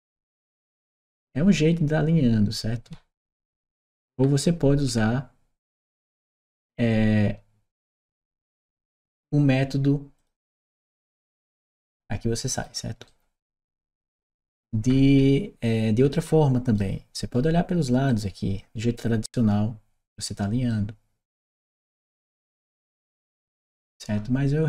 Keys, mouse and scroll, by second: 3.4 s, 4.0 w, 10.0 click, 11.7 click, 12.3 click, 12.9 right click, 13.0-15.0 typing, 13.6 right click, 17.9 drag, 18.8 click, 20.2 right click, 21.6 click, 23.0 click.